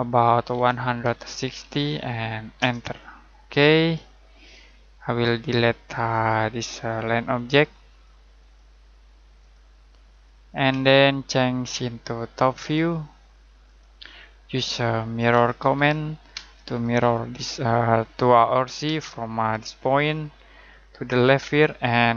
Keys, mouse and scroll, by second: 0.5-1.6 typing, 2.5 Return, 3.6 middle click, 6.1 click, 10.7 Delete, 12.5 click, 14.4-14.8 scroll down 1, 14.8 middle click, 15.3-16.3 typing, 16.9 click, 18.8 space, 20.4 click.